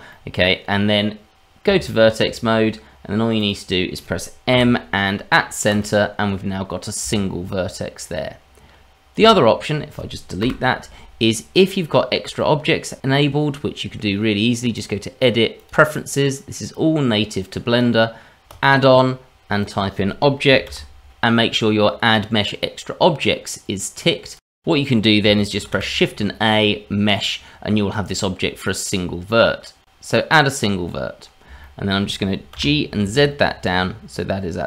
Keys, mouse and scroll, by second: 0.1 middle click, 1.6 Tab, 3.4 click, 4.5 m, 7.0 Tab, 9.2 Tab, 10.4 Delete, 14.7 click, 25.6 shift+a, 31.1-31.4 scroll up 2, 31.6 shift+middle click, 32.5 g.